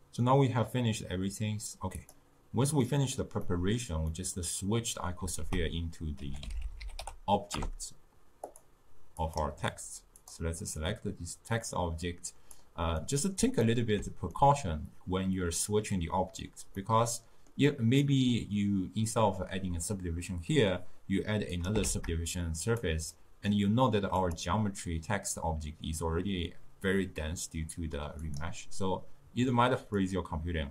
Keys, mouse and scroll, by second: 2.1 click, 3.0-5.6 middle drag, 5.6 ctrl+a, 9.3 click, 11.6-13.1 drag, 13.1-21.2 middle drag, 21.7 click, 22.0 shift+d, 23.3-24.3 middle drag, 24.3 click, 28.4 click, 30.1-30.7 drag.